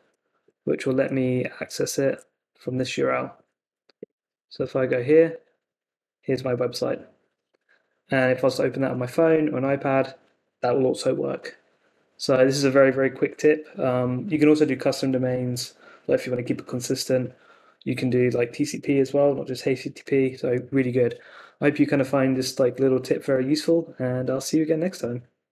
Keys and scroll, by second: 2.0 super+c, 3.7 super+v, 4.0 Return.